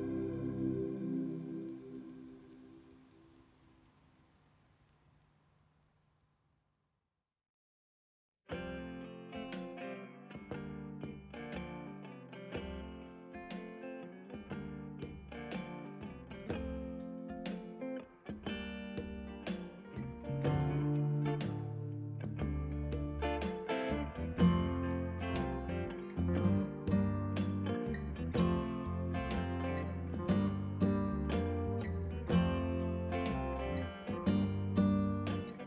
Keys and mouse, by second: 0.4 KP_Decimal, 0.5 Return, 1.9 click, 2.2 KP_Decimal, 2.3 KP_3, 2.4 Return, 2.9 click, 3.3 KP_0, 3.4 Return, 3.7 click, 5.9 ctrl+1, 6.0 click, 11.0 click, 12.4 y, 13.0 click, 14.4 ctrl+click, 15.0 click, 17.8 click, 25.3 alt+y, 25.6 click, 27.3 right click, 27.8 click, 29.4 right click, 30.1 click, 32.9 KP_2, 33.1 Return.